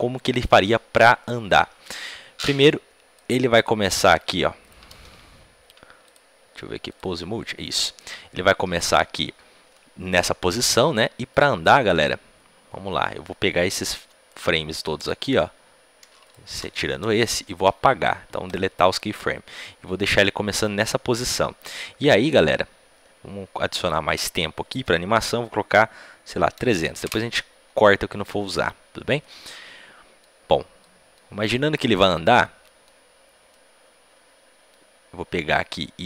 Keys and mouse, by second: 2.3-10.6 drag, 9.7 middle click, 18.4 Delete, 19.8-21.5 drag, 29.1-32.0 middle drag, 32.4-36.0 middle drag.